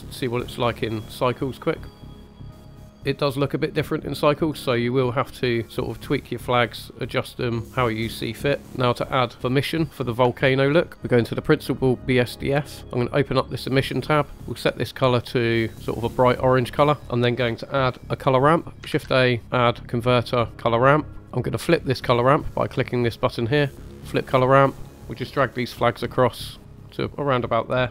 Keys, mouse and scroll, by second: 1.1 click, 2.3 middle click, 4.4 middle click, 5.2 scroll up 2, 6.4-8.3 drag, 8.6 scroll down 3, 10.4 shift+middle click, 10.9 middle click, 10.9 scroll up 2, 13.0 click, 14.0 scroll down 1, 15.1 click, 17.0 middle click, 17.0 scroll down 1, 18.9 shift+a, 21.2 middle click, 21.2 scroll up 3, 22.0 scroll up 2, 22.7-24.0 drag, 24.7-25.9 drag, 26.7-27.9 drag.